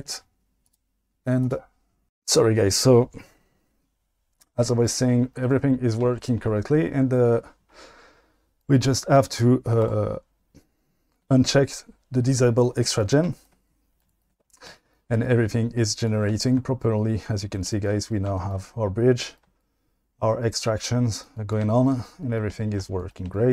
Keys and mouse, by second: 1.4-2.1 drag, 10.3 click, 16.0-16.3 drag.